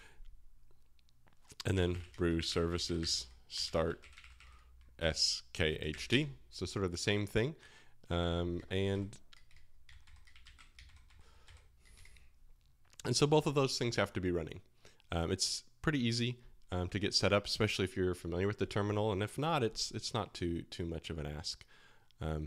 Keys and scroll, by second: 0.0-6.6 typing, 8.6-10.4 typing, 10.5 ctrl+c, 11.0 Up, 11.4 Up, 11.9 Return.